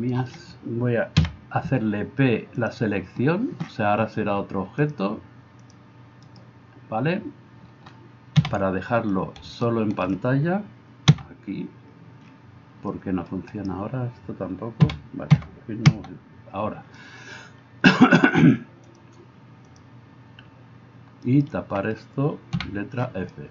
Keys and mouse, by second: 1.2 p, 6.2 right click, 8.4 KP_Divide, 11.1 KP_Divide, 13.5 right click, 15.9 KP_Divide, 21.3 alt+right click, 22.6 f.